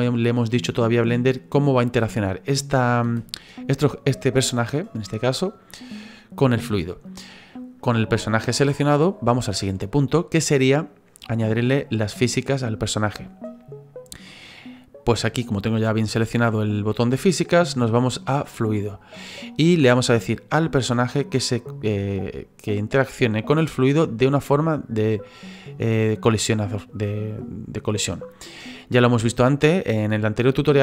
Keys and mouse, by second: 3.0 space, 17.5 click, 18.6 click, 22.6 click, 25.0 click.